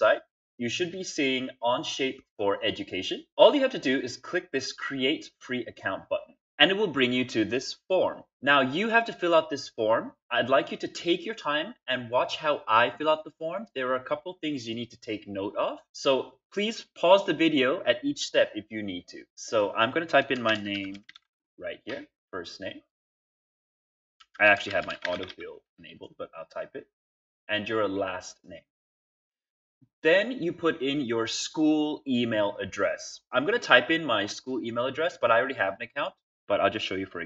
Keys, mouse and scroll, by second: 20.2-21.5 typing, 24.1-25.6 typing, 28.8-31.9 middle drag, 28.8-31.9 scroll down 2, 37.1-37.2 typing.